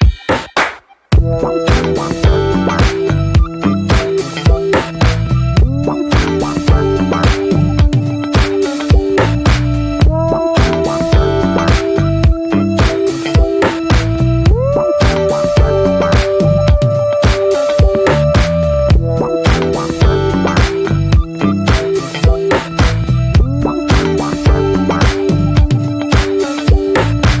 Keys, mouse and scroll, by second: 1.2 scroll down 1, 1.3-1.7 middle drag, 1.7 drag, 2.0 middle click, 2.5 i, 4.7 click, 5.1 /, 6.4 middle click, 6.6 /, 6.9 middle drag, 7.2 Tab, 7.9 click, 8.4-10.5 alt+shift+drag, 10.5-11.3 middle drag, 11.3 x, 11.7 scroll down 2, 11.9 middle click, 12.1 scroll up 1, 12.4 Tab, 12.9 Tab, 14.1 right click, 14.5 ctrl+s, 14.8 middle drag, 15.1 Tab, 15.8-16.3 shift+middle drag, 16.3 Tab, 17.3-18.3 drag, 18.3-19.0 middle drag, 19.0-19.3 alt+shift+drag, 19.3-20.1 shift+middle drag, 20.1-21.0 alt+shift+drag, 21.0-21.9 right drag, 21.9-22.3 middle drag, 22.3-23.4 shift+drag, 23.4-24.4 right drag, 24.4-26.5 drag, 26.5-27.4 right drag.